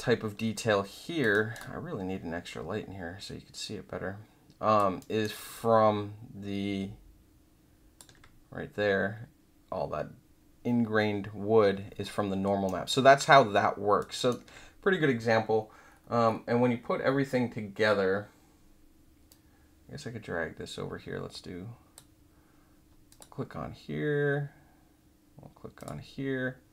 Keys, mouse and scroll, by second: 1.3 alt+middle click, 1.5-4.7 alt+drag, 4.9 alt+middle click, 5.4-7.9 alt+drag, 12.0 alt+middle click, 12.6 alt+right click, 13.1 alt+click, 14.1 alt+right click, 15.8-16.4 scroll down 4, 19.2-21.9 drag, 23.0 click, 25.7 click.